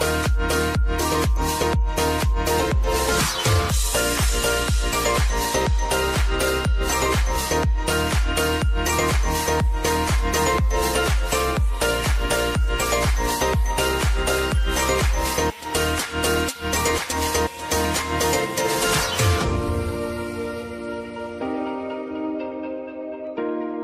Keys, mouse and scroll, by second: 1.6 v, 2.0-7.9 drag, 7.9 space, 11.3 space, 15.0 click, 15.3 space, 16.7 n, 16.9 space, 23.4 space.